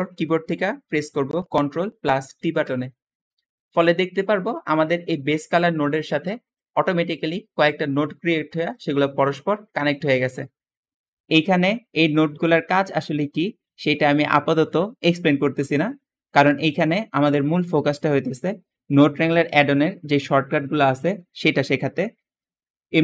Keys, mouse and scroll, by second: 2.2 ctrl+t, 2.3 ctrl+t, 2.9-3.6 scroll down 2, 3.2-4.3 middle drag, 3.6-4.3 scroll up 1, 4.3-5.7 drag, 5.7-7.4 scroll up 1, 7.4-8.9 scroll up 1, 8.9-9.6 scroll up 1, 9.6 click, 10.3 scroll up 1, 11.0 Escape, 11.7 g, 11.9 g, 13.0 g, 14.1 g, 15.0 shift+middle click, 15.0-15.8 scroll up 1, 18.9-19.6 scroll down 2, 19.6-19.9 scroll up 2.